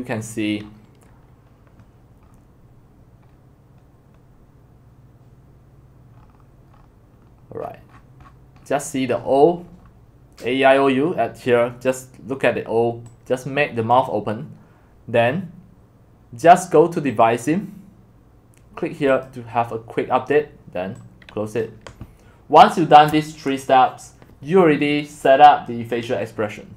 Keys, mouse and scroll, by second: 2.2 scroll down 2, 2.3-3.3 middle drag, 3.3 click, 3.3-6.1 middle drag, 6.1-8.2 scroll, 8.2-11.6 scroll down 35, 11.6-13.1 scroll down 1, 13.1-13.8 scroll down 1, 13.8 scroll down 1, 13.9-19.2 drag, 24.1-26.7 drag.